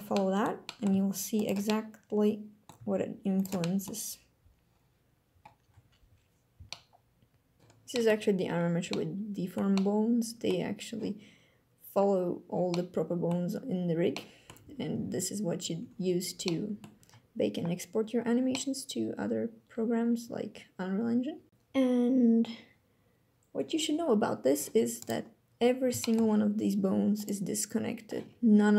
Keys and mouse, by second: 0.3 click, 0.8 click, 1.0 g, 1.4 drag, 1.7-2.8 drag, 2.8 g, 3.4 drag, 3.7 drag, 6.7-7.5 drag, 7.6 click, 8.6 click, 9.4-10.2 drag, 12.4-13.0 drag, 13.8-14.2 drag, 14.7 a, 16.1 click, 18.2-21.3 drag, 25.7 shift+drag, 27.4-27.9 drag.